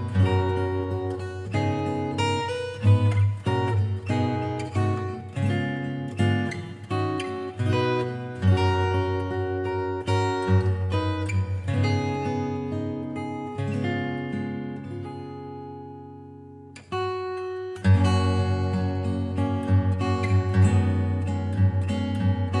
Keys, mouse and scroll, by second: 0.4-0.8 scroll, 1.5 scroll up 5, 2.5 click, 2.8 scroll, 5.0 click, 8.1 click, 8.4 click, 9.4 Delete, 10.0 click, 12.5 F3, 15.7-16.6 typing, 17.6 click, 18.7 click, 21.3 click, 22.0 click.